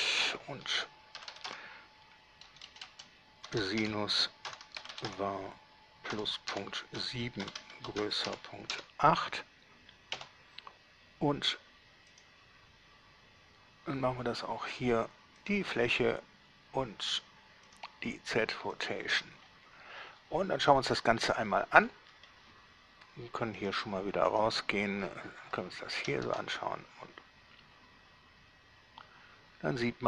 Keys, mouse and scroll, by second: 0.3 click, 1.4-5.3 typing, 6.8-8.9 typing, 10.4 Return, 12.3 click, 15.7 click, 17.9 click, 19.0 click, 20.7 scroll down 1, 22.3 middle click, 23.8 click, 24.6 click, 25.3 scroll down 2, 25.7-26.5 shift+middle drag, 26.5 alt+shift+a.